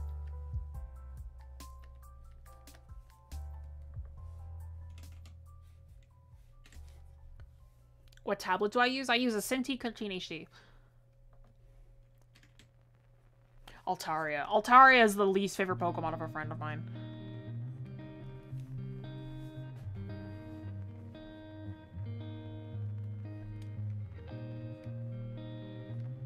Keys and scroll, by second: 23.0 ctrl+z.